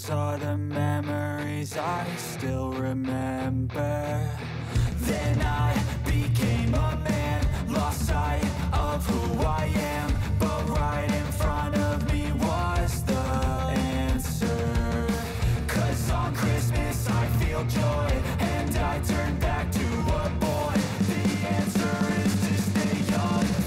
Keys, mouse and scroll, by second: 0.1-5.4 drag, 6.1 [, 6.7 space, 8.6 click, 8.9 space, 11.2 click, 15.2 click, 15.8 space, 16.9 click, 17.2 space, 20.2 click, 21.0-21.5 typing, 22.7 click.